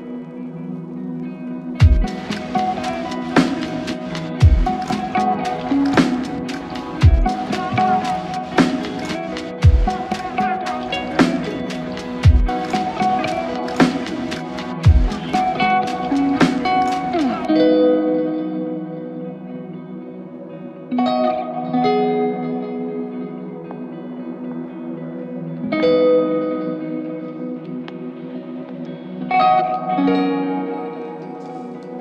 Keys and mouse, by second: 8.1 double click, 10.5 click, 10.7 alt+click, 13.2 double click, 13.9 f, 14.9 alt+click, 16.2 double click, 24.5 alt+click, 30.3 alt+click.